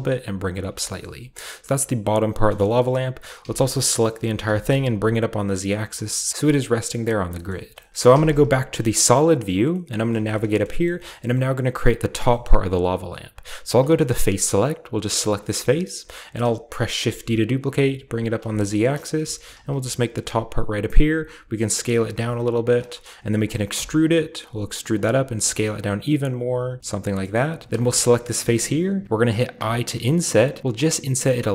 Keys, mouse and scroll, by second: 0.0-2.2 typing, 0.6-1.9 scroll down 1, 1.9-2.2 scroll up 1, 2.8 middle click, 3.4 typing, 3.8 middle click, 4.4 typing, 7.3 shift+middle click, 7.5-7.9 shift+scroll up 1, 7.9-8.8 typing, 10.1 shift+middle click, 10.4 shift+middle click, 10.4-11.4 shift+scroll down 7, 11.4 middle click, 11.4 typing, 11.4 scroll up 1, 12.1 scroll down 1, 12.5-13.7 shift+middle drag, 13.7 click, 14.0-15.0 shift+scroll up 1, 15.0 middle click, 15.3 scroll down 1, 15.4 shift+middle click, 16.9 middle click, 16.9 scroll down 1, 17.0-17.6 typing, 18.3 click, 18.5-20.7 scroll down 1, 18.6 middle click, 19.3 g, 19.5 z, 21.1-22.2 typing, 22.0 click, 22.8 shift+click, 22.9 shift+middle click, 23.0-23.7 shift+scroll up 1, 23.7-24.7 scroll up 1, 23.8 typing, 24.7 shift+scroll up 1, 24.9-26.2 drag, 25.1 typing, 26.8-29.0 middle drag, 27.0-29.5 scroll up 1, 29.6 typing.